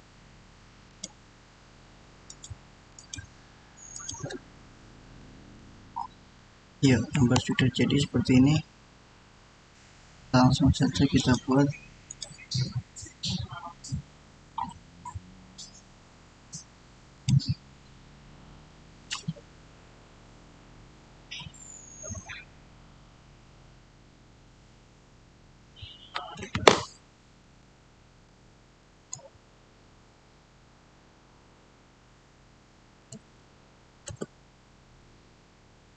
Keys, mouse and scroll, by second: 5.7 click, 5.8 scroll up 1, 6.2-9.7 middle drag, 9.7 click, 11.0 click, 13.9 scroll up 1, 17.0 click, 27.4-28.0 typing, 28.8 Tab, 32.8-33.5 typing, 33.9 Return.